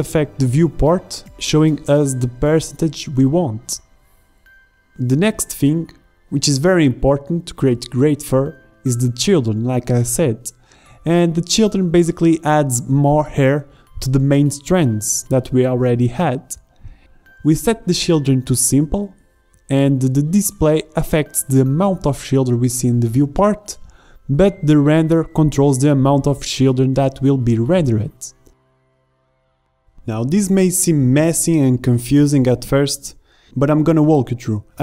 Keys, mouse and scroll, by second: 7.9-8.8 middle drag, 11.5-13.2 middle drag, 13.2-13.8 drag, 13.9-16.3 drag, 16.4-19.3 drag, 29.6-29.9 middle drag, 29.9-31.3 drag, 31.3 middle drag, 33.3-34.8 middle drag.